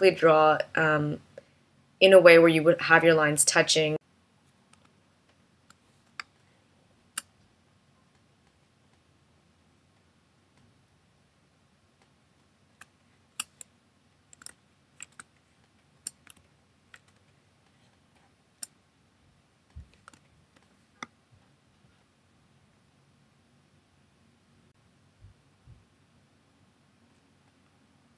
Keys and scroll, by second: 4.5 v, 5.8 space, 12.4 space, 14.8 space, 16.8 space, 19.7 v.